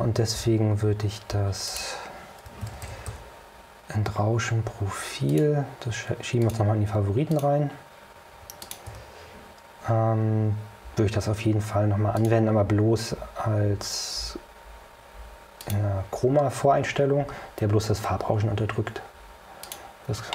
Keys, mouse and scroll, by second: 1.8 click, 2.5-3.7 typing, 5.4 click, 6.5 click, 7.4 click, 8.7 click, 9.0 Escape, 12.3 click, 15.7 click, 19.7 click.